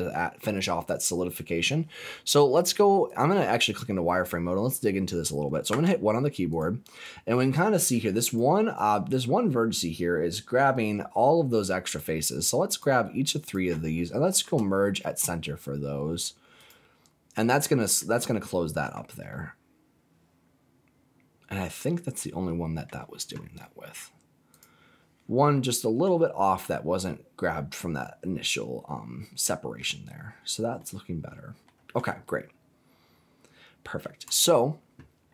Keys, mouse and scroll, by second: 3.1 click, 3.8-4.4 scroll up 1, 4.4-5.6 scroll up 2, 5.6 1, 6.4 click, 8.2 click, 8.7 click, 12.6 shift+click, 13.4 shift+click, 14.3 m, 17.9 middle click, 19.0 scroll down 1, 19.2-22.8 middle drag, 24.4 click, 25.5 shift+middle click, 26.5-29.7 middle drag, 30.1-30.7 scroll down 4, 30.7 middle click, 31.9 scroll down 1, 32.2-34.0 middle drag, 34.2 click.